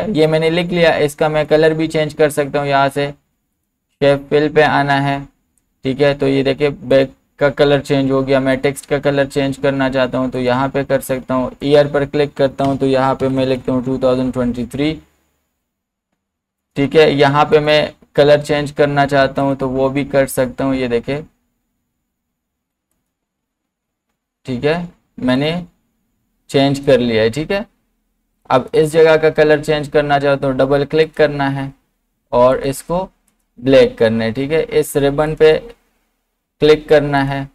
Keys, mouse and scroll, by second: 1.5 click, 6.9 click, 6.9 click, 12.7 BackSpace, 16.6 BackSpace, 16.6 click, 22.9 click, 25.4 click, 31.1 click.